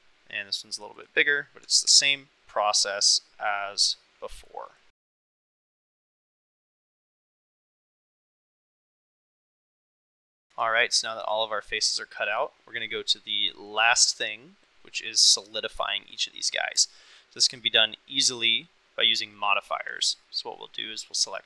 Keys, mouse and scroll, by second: 0.9 click, 1.8 ctrl+r, 4.6 middle click, 5.1 shift+middle click, 5.4 click, 6.3 middle click, 6.8 Delete, 7.1 Tab, 7.6 click, 10.0 drag, 10.2 middle click, 11.1 shift+middle drag, 11.4-12.3 middle drag, 15.3-15.6 middle drag, 15.9 shift+middle drag, 16.9 shift+middle drag, 20.0 click.